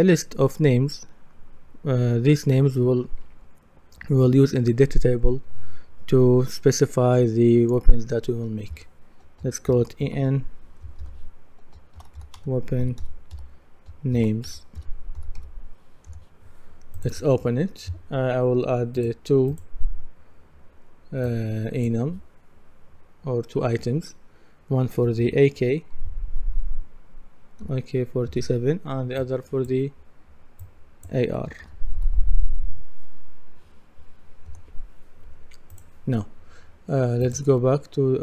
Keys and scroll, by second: 9.7 shift+e, 10.0 shift+n, 11.7-15.9 typing, 16.1 Return, 25.2 shift+a, 26.0 shift+k, 31.6 shift+a, 32.0 shift+r, 34.5 Return.